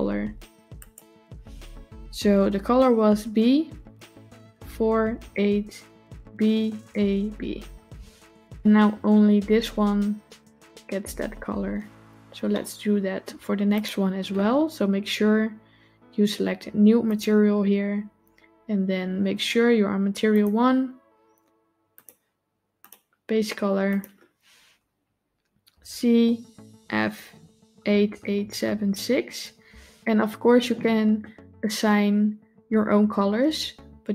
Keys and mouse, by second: 12.5-13.1 shift+middle drag, 13.6 click, 16.9 click, 21.8 click, 27.9 KP_8.